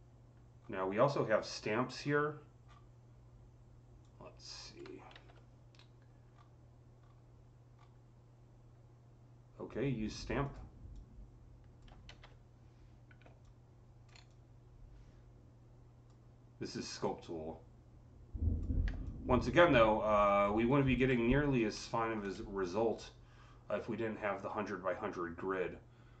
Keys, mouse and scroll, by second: 0.4-1.0 scroll down 3, 1.8 scroll down 7, 2.5-3.0 scroll up 6, 3.9-6.2 drag, 5.0 ctrl+z, 6.1-6.8 scroll down 4, 6.9-7.6 scroll down 3, 7.6 scroll down 3, 10.3 click, 10.3-10.6 scroll down 1, 10.3 c, 10.8-13.3 drag, 11.7-14.2 typing, 13.3-20.3 drag, 20.3-20.7 scroll up 7, 21.2 alt+click, 21.6 alt+middle click.